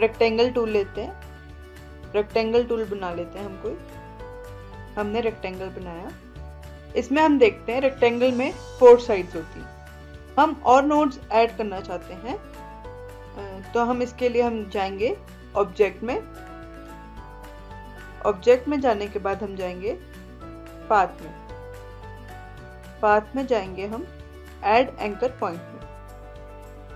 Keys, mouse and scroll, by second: 16.6 click, 21.3 click, 25.5 click.